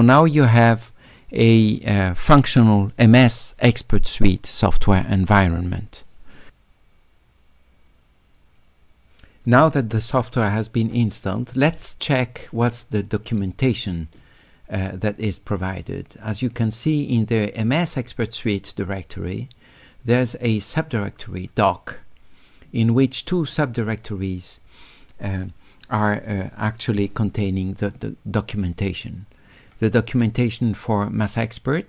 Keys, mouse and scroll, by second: 12.5 click, 12.7 click, 21.4 click, 21.6 click, 29.5 click, 29.6 click.